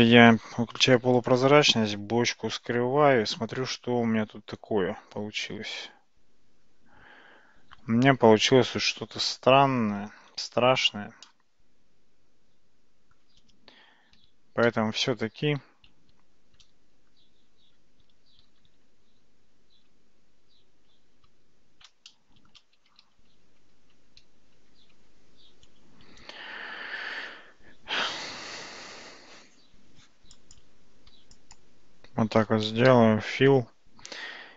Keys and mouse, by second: 0.5 alt+z, 2.4 h, 3.8-10.6 middle drag, 11.3-13.2 middle drag, 14.2 ctrl+z, 14.7 ctrl+z, 15.2 ctrl+z, 15.4 ctrl+z, 16.0 ctrl+z, 18.6 alt+z, 19.9 alt+z, 21.3 ctrl+z, 22.1-22.6 middle drag, 23.0 ctrl+z, 23.3 ctrl+z, 23.9 ctrl+z, 24.2 ctrl+z, 24.6 ctrl+z, 25.0 ctrl+z, 26.6 Tab, 30.0 Tab, 30.4 click, 31.5 shift+click, 32.9 f.